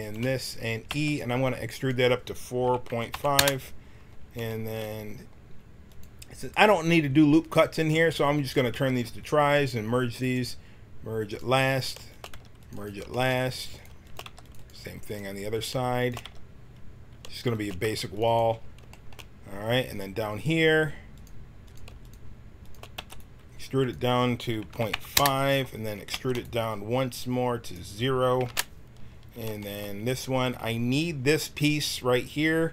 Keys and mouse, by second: 0.8 e, 5.8-8.7 right drag, 8.7 w, 11.7 right click, 12.3 w, 13.0-14.2 middle drag, 14.2 w, 16.2 w, 17.8 w, 21.1-23.2 drag, 22.9 e, 26.1 e, 27.6-29.3 drag.